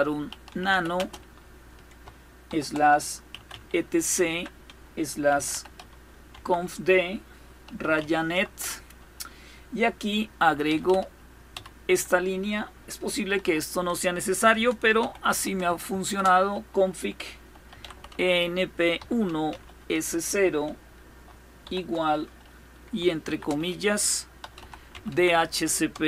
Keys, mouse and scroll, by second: 0.0-1.0 typing, 2.1-8.1 typing, 10.1-11.9 typing, 13.0 typing, 14.2-15.5 typing, 17.2-19.6 typing, 21.3 typing, 22.9 typing, 24.1-24.7 typing, 25.9-26.0 typing.